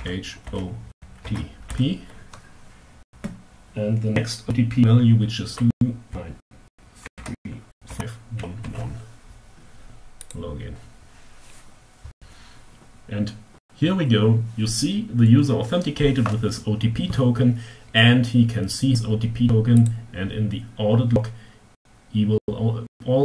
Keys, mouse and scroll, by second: 0.0 o, 0.6 t, 1.1 p, 5.3-7.8 typing, 9.8 click, 19.4 click.